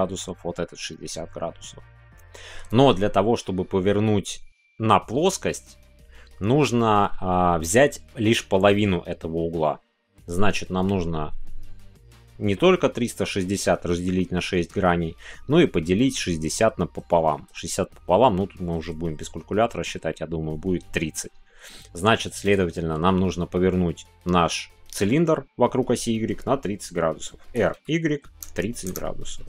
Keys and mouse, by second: 24.7 middle click, 28.3 KP_3.